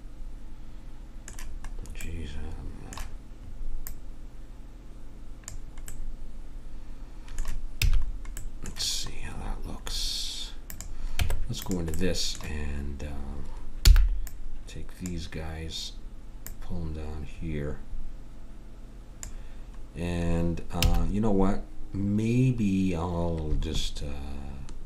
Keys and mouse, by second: 3.8-5.6 middle drag, 7.9 a, 11.3 Tab, 13.9 b, 16.4 click, 20.8 a.